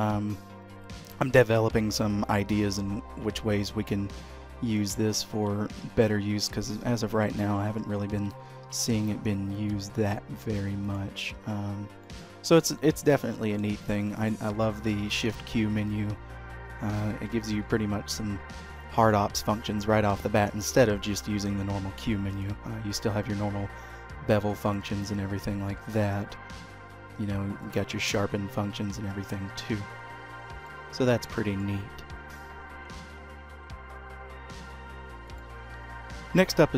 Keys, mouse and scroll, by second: 7.6 ctrl+z, 8.2 ctrl+z, 8.6 ctrl+z, 9.9-11.0 scroll up 1, 11.0 click, 11.5 h, 11.9 scroll down 1, 12.2 middle click, 13.0 click, 13.4-13.7 scroll up 2, 14.0 shift+middle click, 14.2 middle click, 14.8 shift+q, 17.6 shift+q, 25.9 shift+q, 27.5-28.3 typing, 30.8 middle click, 32.1 x, 36.3 middle click.